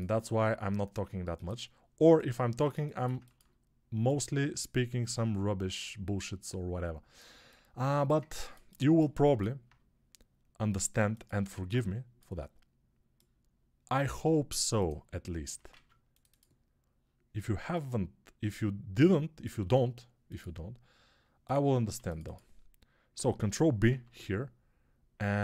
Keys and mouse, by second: 0.1-11.4 drag, 0.1 s, 11.4 alt+z, 11.4-14.4 alt+middle drag, 14.4 click, 15.3-18.6 ctrl+middle drag, 15.6 ctrl+r, 18.6-21.8 drag, 21.8-25.4 middle drag, 21.8 2, 23.7 ctrl+b.